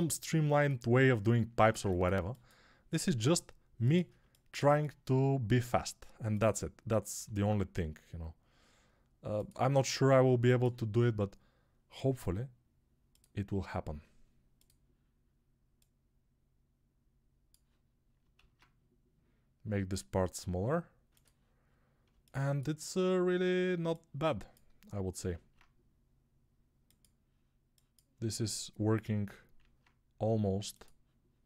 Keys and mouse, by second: 2.5-4.0 drag, 3.0 g, 4.0-6.0 alt+shift+middle drag, 6.0 click, 6.4-18.1 middle drag, 7.0 g, 18.1-21.3 alt+drag, 18.2 alt+s, 21.3-25.0 middle drag, 25.0-31.4 alt+drag, 25.2 alt+s, 29.4 alt+s.